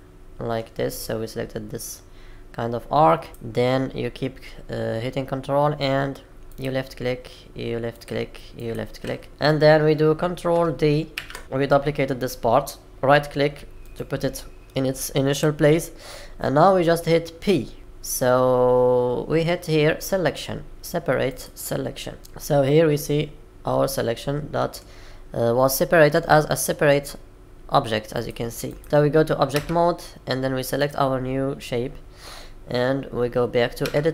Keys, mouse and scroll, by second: 11.1 shift+d, 22.2 middle click, 26.0-26.5 scroll down 3, 28.8 click, 29.5 Tab, 30.7 click, 33.8 Tab.